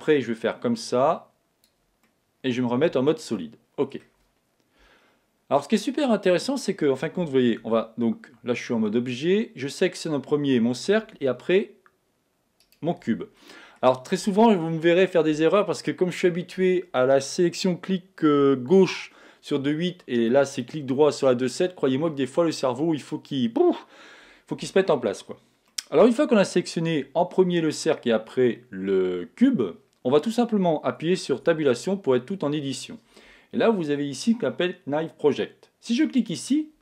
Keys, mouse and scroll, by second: 0.4 click, 2.0-5.3 middle drag, 4.8 KP_1, 6.3-8.2 middle drag, 7.6 Tab, 13.4-15.3 middle drag, 13.4 right click, 31.3 Tab, 36.2 click.